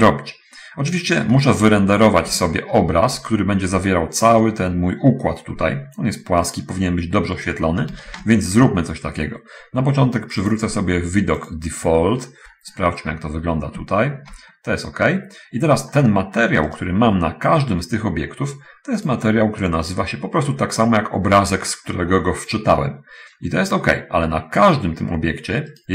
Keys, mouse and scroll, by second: 2.3 scroll, 2.8 shift+middle click, 11.8 click, 13.3 scroll down 2, 14.2 shift+middle click, 15.1-16.2 middle drag, 16.6 right click, 19.4 click, 25.0 right click, 25.7 right click.